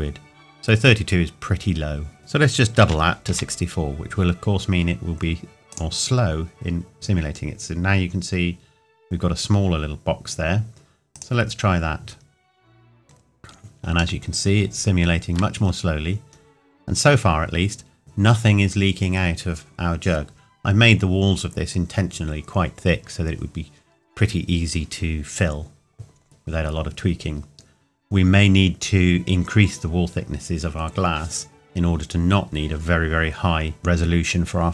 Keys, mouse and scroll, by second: 2.2 click, 2.8 KP_6, 5.7 click, 11.1 click, 12.2 scroll down 1, 14.2 shift+middle click, 16.2-16.6 scroll up 1.